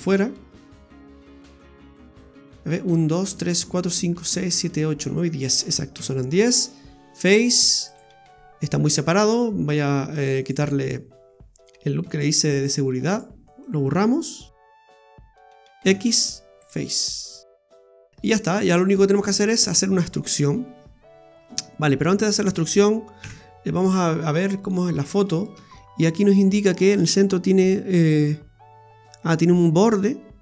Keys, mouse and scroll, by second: 0.4 shift+right click, 0.9 shift+right click, 1.3 shift+right click, 5.9 x, 10.2 right click, 10.4 alt+shift+right click, 10.6 right click, 12.1 alt+shift+right click, 13.1 alt+shift+right click, 13.5 alt+shift+right click, 15.0 alt+shift+right click, 15.9 x, 18.1 middle click, 18.1 scroll up 3, 18.3 scroll down 2, 18.6 middle click, 21.2-22.3 scroll down 9, 23.2 KP_Divide, 23.8-24.4 scroll down 9, 24.6 middle click, 24.9 scroll up 1, 25.1 shift+middle click, 25.5-26.0 scroll up 8, 26.2 shift+middle click, 28.2-29.5 scroll up 2.